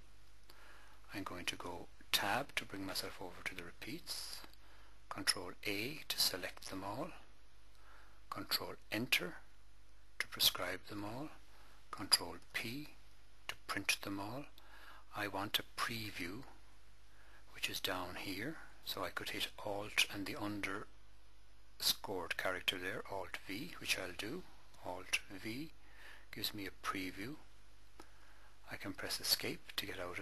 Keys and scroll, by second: 2.1 Tab, 5.5 ctrl+a, 8.8 ctrl+Return, 12.1 ctrl+p, 25.3 alt+v, 29.0 Escape.